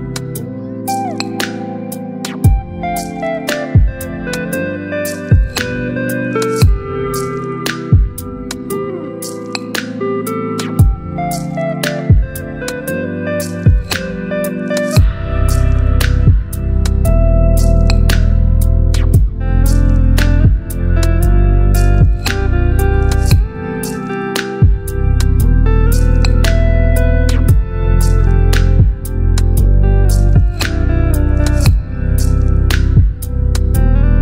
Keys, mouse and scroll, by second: 1.6 ctrl+g, 6.1-8.2 drag, 9.8-13.9 alt+drag, 14.1-16.4 drag, 20.8 click.